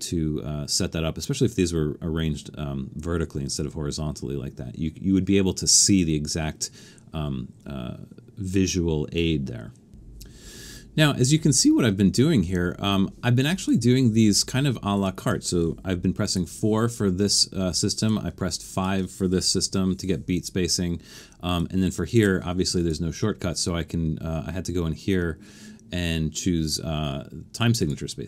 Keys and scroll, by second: 16.4 4, 19.6 shift+5.